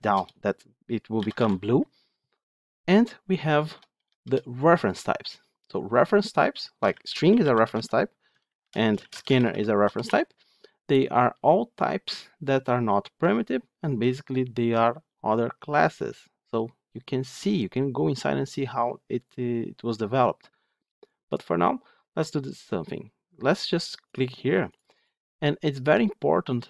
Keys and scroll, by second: 8.3 ctrl+shift+Left.